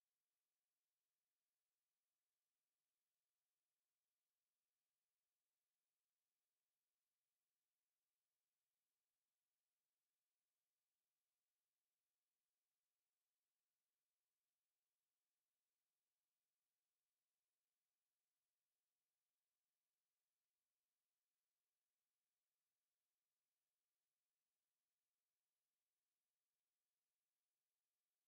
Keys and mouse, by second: 2.6 s, 3.1 KP_Divide, 5.8 KP_7, 7.0 KP_5, 8.6 middle click, 9.4 middle click, 9.7 g, 12.7 s, 17.5 s, 20.7-21.7 drag, 21.7-22.3 middle drag, 23.3 KP_3, 27.9 KP_1.